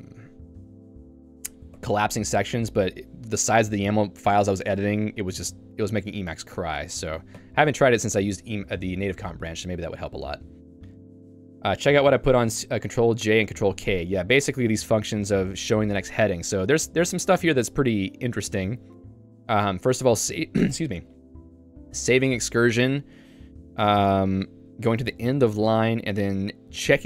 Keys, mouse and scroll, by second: 1.0 Escape, 1.9 ctrl+u, 7.5 ctrl+u, 9.8 j, 14.7 k, 15.2 j, 16.3 k, 16.6-17.6 l, 18.8-22.3 typing.